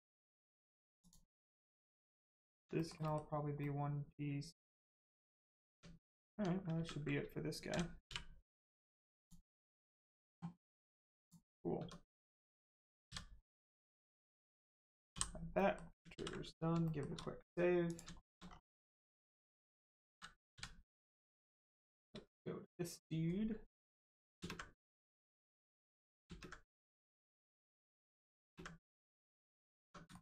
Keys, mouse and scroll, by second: 0.9 click, 1.3 middle click, 2.7 shift+middle click, 3.0 middle click, 5.5 scroll down 1, 5.6 Tab, 6.0 middle click, 6.3 Tab, 6.7 ctrl+space, 8.0 space, 9.1 click, 9.6 scroll down 1, 11.1 click, 11.7 Tab, 15.5 middle click, 16.1 ctrl+s, 16.7 shift+s, 16.8 shift+middle click, 17.8 middle click, 18.1 shift+middle click, 18.4-19.1 scroll down 1, 19.1 middle click, 20.9 middle click, 21.9 shift+middle click, 24.3 ctrl+space, 24.7 middle click, 26.2 ctrl+space, 27.5 click, 28.3 ctrl+space, 28.8 space, 28.9 middle click, 29.4 scroll up 1, 29.8 Tab, 30.0 shift+middle click.